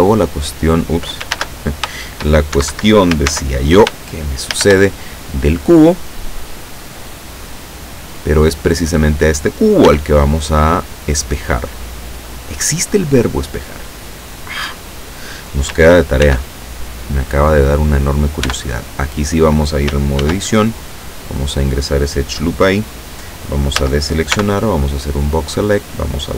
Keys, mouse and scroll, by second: 0.1 click, 1.4 ctrl+a, 2.6 shift+Escape, 3.3 ctrl+z, 4.6 shift+a, 6.7 click, 8.1-9.5 drag, 9.9 s, 12.1 click, 16.3 ctrl+r, 18.5 Tab, 20.3 ctrl+r, 20.9 click, 23.8 a, 24.4 b, 25.1 click.